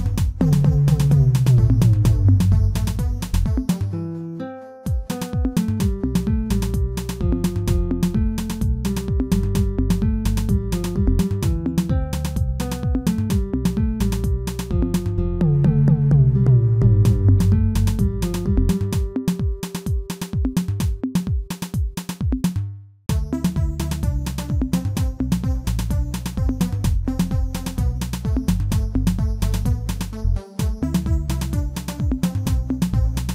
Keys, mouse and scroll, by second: 6.2 middle click, 6.7 middle click, 7.2 shift+z, 7.9 shift+z, 8.3-9.1 scroll up 1, 9.1 e, 11.7 e, 12.1 g, 15.0 f, 15.4 i, 17.0 Tab, 17.4 Tab, 18.0 alt+click, 18.6 s, 20.2 Tab, 20.4-20.7 scroll down 3, 20.7-21.2 middle drag, 21.2 scroll down 1, 21.6-23.9 shift+middle drag, 23.9-25.2 right drag, 25.2-26.1 middle drag, 26.1 KP_1, 27.0-27.3 scroll up 2, 27.3 shift+middle drag, 27.5-28.9 shift+middle drag, 28.9 Tab, 29.2 a, 29.5 shift+middle click, 30.4 Tab.